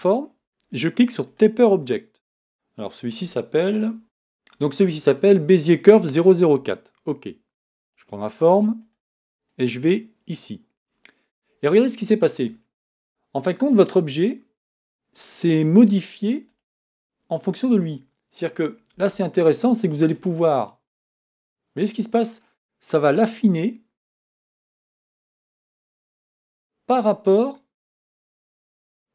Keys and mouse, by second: 8.6-13.9 right drag, 19.0 Tab, 28.7-29.1 right drag.